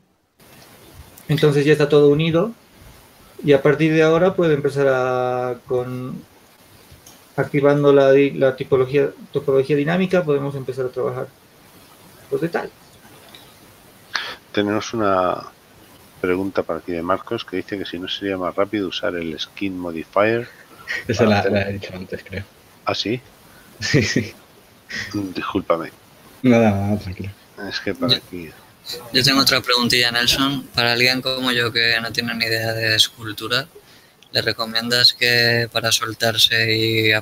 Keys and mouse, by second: 4.1 Tab, 6.3 alt+w, 26.1 z, 34.1-36.6 drag.